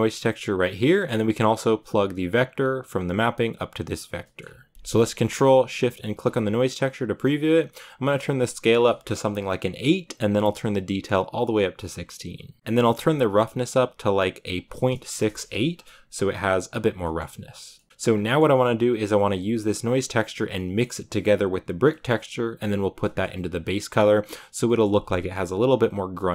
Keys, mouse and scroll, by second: 3.8 click, 4.2 middle click, 4.4-4.7 scroll up 3, 5.8 ctrl+shift+click, 6.6 scroll down 3, 8.8 click, 9.3 scroll up 5, 10.5-15.1 drag.